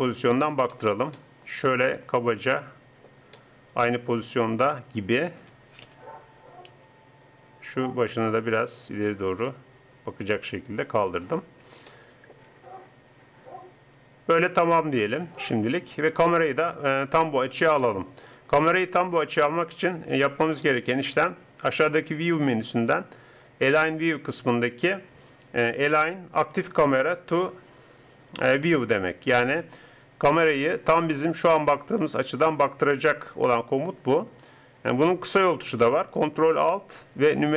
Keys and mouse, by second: 5.4 r, 11.9-13.9 drag, 15.9-17.8 middle drag, 17.8 click.